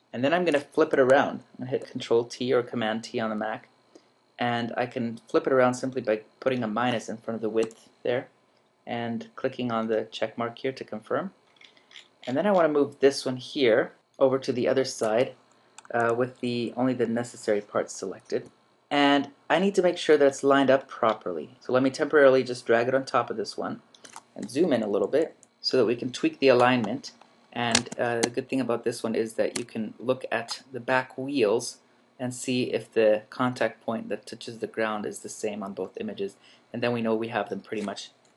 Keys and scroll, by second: 1.8 super+t, 7.6 -, 24.7 super+=, 25.4 super+Down, 25.9 super+Up, 27.0 super+Left, 28.4 shift+super+Left, 29.9 super+Up.